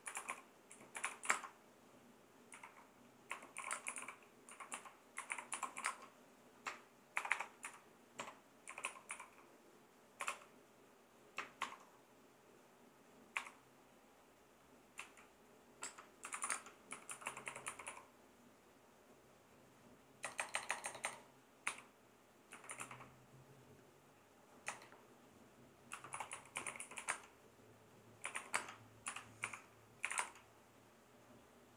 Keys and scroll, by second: 0.0-11.6 typing, 7.6 Left, 13.4 0, 15.0 Right, 15.8-18.4 typing, 20.3-23.3 typing, 24.7 BackSpace, 25.7-30.6 typing.